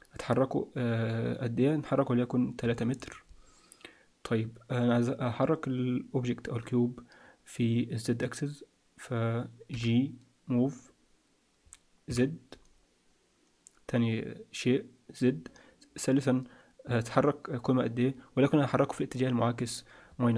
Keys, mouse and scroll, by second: 9.7 g.